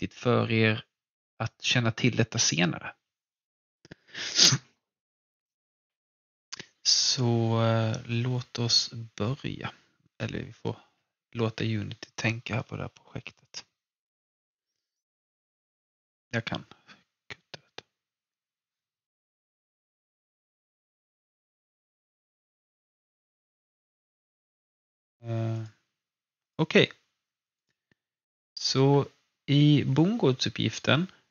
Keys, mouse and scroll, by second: 25.5 click, 25.5 typing.